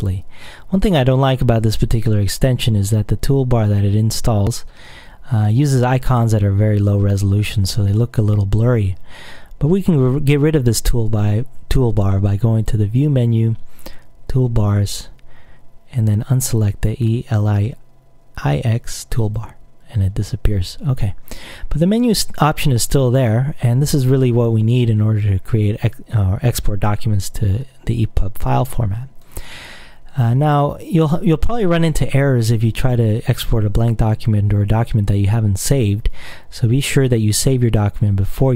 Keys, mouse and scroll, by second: 12.7 click, 19.3 click, 23.3 click, 29.3 click.